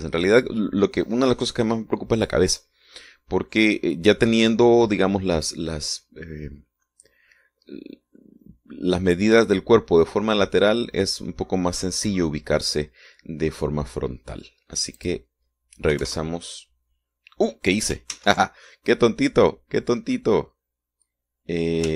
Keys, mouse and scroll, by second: 16.1 click, 17.0 KP_0, 17.1 KP_Enter, 19.2 ctrl+z, 21.2-21.5 scroll down 2.